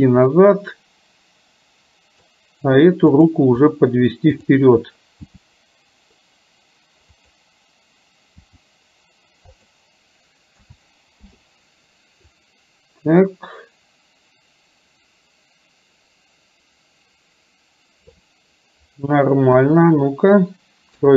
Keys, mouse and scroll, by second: 0.4-2.3 middle drag, 3.3 drag, 4.4 click, 5.3 g, 10.8 a, 11.3 i, 12.4-18.3 drag, 19.5 KP_1, 20.9 KP_3.